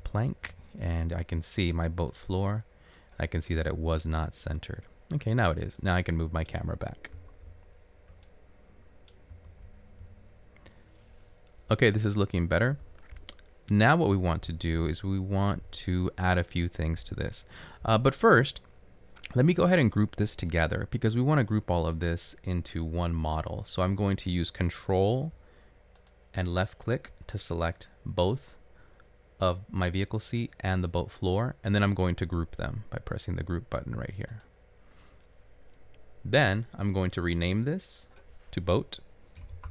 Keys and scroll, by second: 7.0-9.7 typing, 39.6 typing.